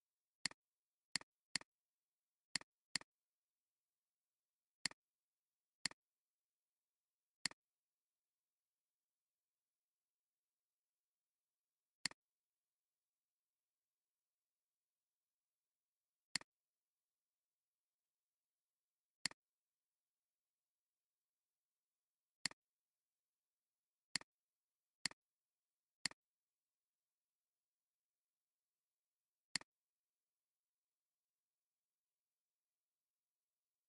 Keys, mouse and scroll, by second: 0.0 space, 0.8 alt+scroll, 0.9 alt+scroll down 1, 1.1 space, 2.3 space, 5.8 right click, 12.0 click, 13.6 ctrl+z, 18.0 ctrl+z, 19.3 right click, 29.5 alt+click, 31.7 ctrl+z.